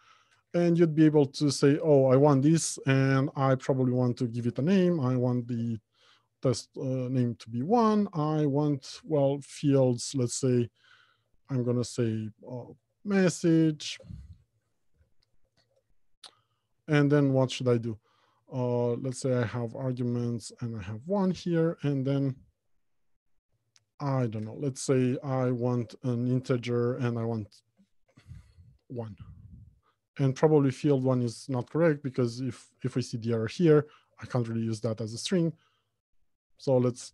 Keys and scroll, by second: 9.9 Return, 10.6 Return, 20.6 Return, 33.0 F2, 34.3 F2, 34.6 ctrl+shift+Right.